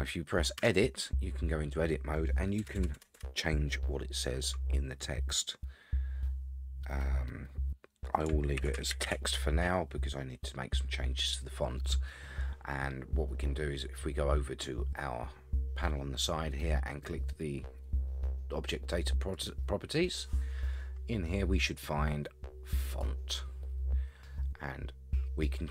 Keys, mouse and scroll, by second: 0.6 Tab, 1.8 scroll up 1, 2.6 BackSpace, 2.8 BackSpace, 2.9 BackSpace, 3.1 BackSpace, 8.6 shift+t, 8.7 e, 8.9 x, 19.3 click, 22.9 click, 23.9-25.2 scroll down 3.